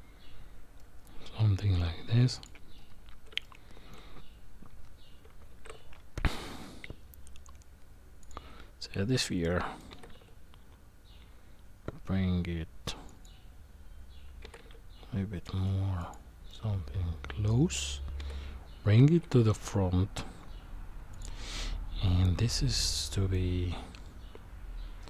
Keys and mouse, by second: 0.8-1.8 middle drag, 3.4-3.9 shift+middle drag, 5.5 shift+a, 9.4 middle click, 9.9 g, 14.4 g, 16.5-17.8 middle drag, 18.2 g, 21.5-23.3 middle drag.